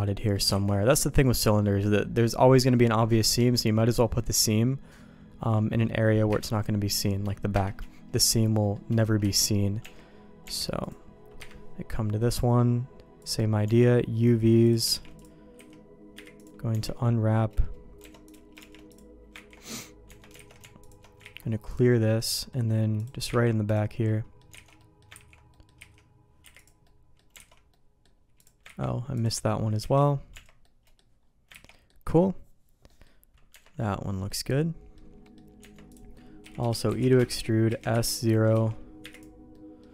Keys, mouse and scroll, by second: 0.0 middle click, 0.6 alt+a, 3.9-5.8 middle drag, 6.3 KP_Divide, 7.5 KP_Divide, 8.2 middle click, 8.6 middle click, 9.2 KP_Divide, 9.8 Tab, 10.4 Tab, 10.8 click, 11.4 KP_Divide, 13.6 Tab, 14.6 click, 15.1 shift+g, 15.6 a, 16.1 u, 16.7 Tab, 18.3 click, 18.8 shift+g, 19.7 ctrl+e, 20.1 Tab, 20.4 alt+a, 21.4 ctrl+e, 22.2 middle click, 23.0 click, 23.3 ctrl+e, 24.1 middle click, 24.6 alt+a, 24.8 middle click, 25.2 ctrl+s, 25.5 middle click, 25.8 a, 26.4 u, 26.8 middle click, 27.4 alt+a, 27.7 middle click, 28.4 click, 28.9 ctrl+e, 29.9 alt+a, 30.3 Tab, 30.6 middle click, 31.6 ctrl+s, 31.7 middle click, 32.9 middle click, 33.5 Tab, 34.3 middle click, 35.2 middle click, 35.6 Tab, 35.9 click, 36.4-39.0 typing, 39.5 middle click.